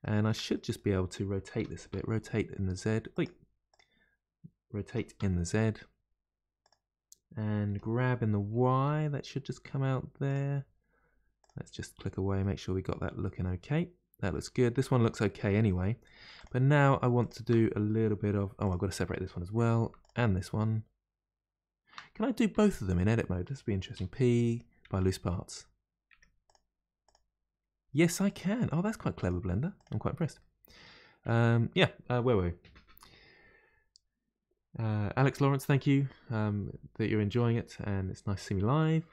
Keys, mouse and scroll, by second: 1.6 r, 3.6 click, 4.8 r, 5.0 r, 11.4 drag, 12.4-16.4 middle drag, 16.4 click, 17.2 shift+click, 18.6 click, 20.0 shift+click, 22.5 Tab, 23.0 a, 26.0 Tab, 26.4 click, 27.0 click, 28.2 click, 29.2 click, 29.8 click, 30.4-33.4 middle drag.